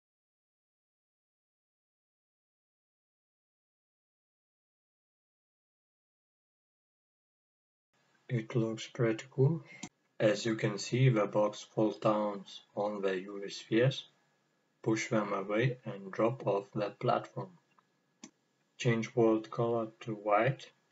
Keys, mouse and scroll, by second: 3.8-4.1 drag, 4.4 middle click, 4.8-5.5 scroll down 2, 5.5-15.7 middle drag, 15.7 click, 17.3 click, 20.7 click.